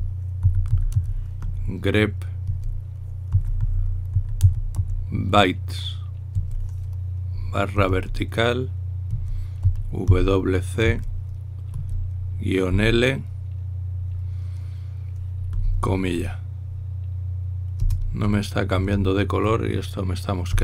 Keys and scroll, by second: 1.0-2.6 typing, 3.7-6.0 typing, 8.5 typing, 10.3-10.8 typing, 12.5-13.4 typing, 18.5 Return, 18.5 ', 19.5 Tab.